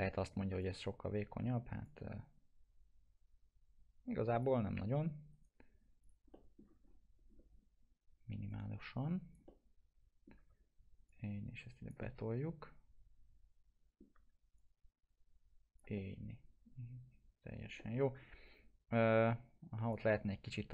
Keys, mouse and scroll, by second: 0.1 scroll up 1, 0.6-4.6 drag, 4.6 scroll down 1, 5.3 right click, 6.0 click, 6.3 alt+middle click, 6.8 scroll up 1, 8.5-9.4 click, 9.5-10.4 alt+middle drag, 11.4-12.0 click, 12.3-14.2 alt+middle drag, 14.9-15.8 click, 15.9-18.1 alt+middle drag, 18.3 scroll up 1, 19.2-20.7 click, 20.0-20.7 alt+middle drag.